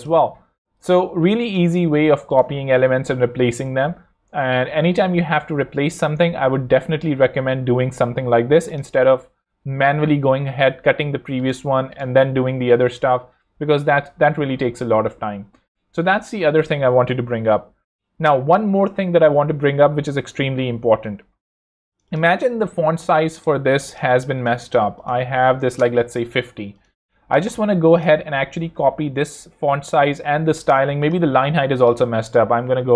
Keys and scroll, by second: 3.8 super+z, 22.8 super+Escape, 25.2-26.1 typing, 32.8 5.